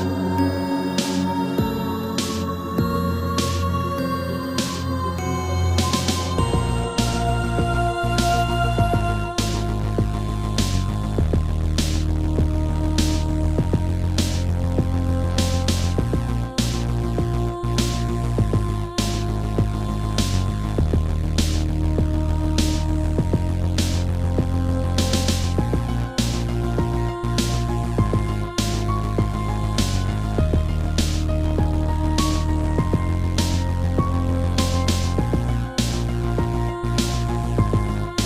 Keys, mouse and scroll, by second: 0.0 shift+middle click, 1.1 1, 1.7 3, 2.5 g, 4.3 click, 4.4 click, 4.7 scroll down 2, 5.1 shift+middle click, 6.6 click, 6.7 click, 7.0 scroll down 2, 7.4 shift+middle click, 7.8 r, 9.2 click, 9.3 click, 9.9 Down, 10.7 Up, 11.7 Down, 12.1 Down, 12.9 Up, 15.6 click, 16.6 shift+click, 17.9 b, 18.3 click, 19.2 scroll down 1, 19.7 shift+middle click, 20.6 g, 22.3 click, 22.4 click, 23.3 Right, 24.4 click, 25.2 click, 25.2 7, 26.2 shift+middle click, 27.1 g, 28.7 click, 29.7 click, 29.9 g, 30.9 click, 31.0 click, 31.2 middle click, 33.1 scroll down 1, 33.3 middle click, 33.8-34.1 scroll down 1, 34.1 shift+middle click, 34.7 middle click, 36.4 click, 36.5 click, 37.3 7.